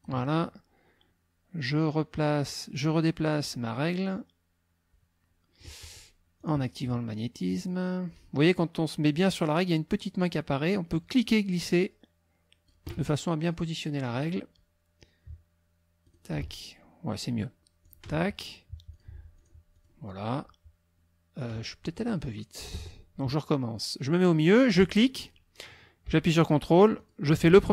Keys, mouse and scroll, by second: 3.4-5.8 drag, 6.4 click, 11.0-12.9 drag, 14.1 click, 16.1 click, 18.9 click, 19.4-20.5 drag, 22.7 Escape, 24.8 click, 27.0 ctrl+click.